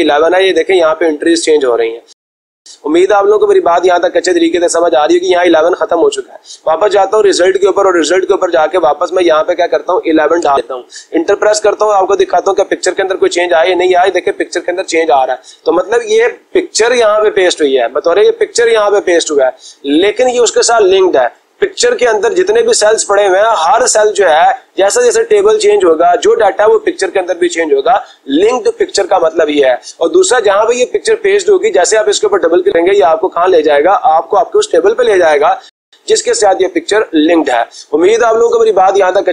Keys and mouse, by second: 1.3-2.3 drag, 7.5 click, 8.8 click, 10.0 1, 10.1 1, 10.4 Return, 12.9 click, 19.4 click, 31.8 click, 32.1 click.